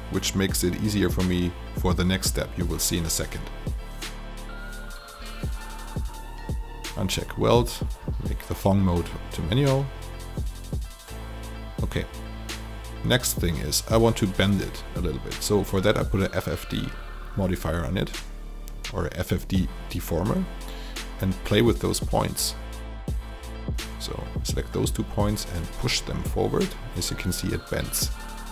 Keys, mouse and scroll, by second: 3.6 alt+click, 5.7 click, 8.1 alt+click, 9.4 alt+n, 9.8 alt+a, 10.4 alt+click, 11.9 alt+middle click, 12.8 click, 13.4 shift+click, 15.7 click, 16.5 alt+click, 19.8 click, 20.5 alt+middle click, 22.3 click, 22.8 alt+click, 24.6 alt+click, 25.9-28.5 drag.